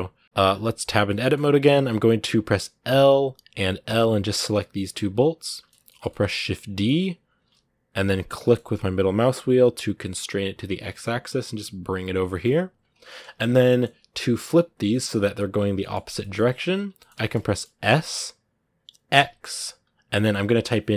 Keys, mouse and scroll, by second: 0.1 scroll up 4, 0.8 middle click, 1.5-2.6 scroll up 1, 2.6 l, 4.2 middle click, 5.0-5.3 scroll down 1, 5.3-6.8 shift+middle drag, 6.8-7.2 scroll down 3, 7.2 shift+d, 12.7 KP_Decimal, 13.3-14.6 middle drag, 14.6 scroll up 1, 14.7 middle click, 15.4 scroll down 1, 15.6-17.7 middle drag, 17.7 s.